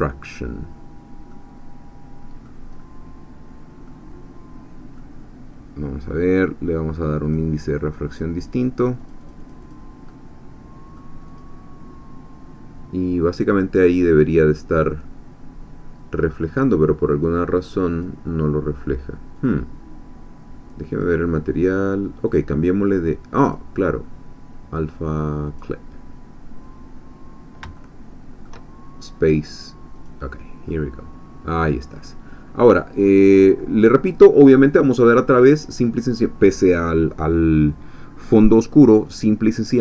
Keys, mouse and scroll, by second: 1.3-2.8 middle drag, 2.8 scroll up 1, 3.9-5.2 middle drag, 7.2 click, 7.8 click, 8.8-9.9 drag, 10.1-11.1 middle drag, 11.4 click, 17.9 click, 19.4 click, 20.9 click, 22.3 click, 23.4 click, 25.4 click, 27.8 shift+middle click, 30.0 click, 30.7-32.8 middle drag, 33.1 scroll down 2, 33.4-34.2 middle drag, 34.3-34.6 scroll up 2, 35.3-36.0 middle drag.